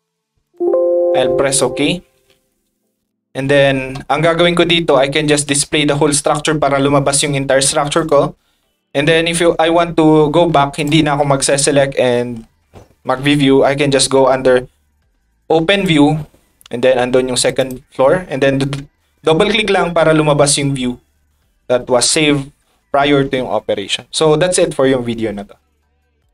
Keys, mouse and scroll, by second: 2.7 click, 3.4-3.7 middle drag, 6.8 click, 7.9 middle click, 9.0-9.3 scroll down 1, 10.5 middle click, 10.8 click, 12.1-12.5 middle drag, 15.7 click, 17.6 click, 26.2 click.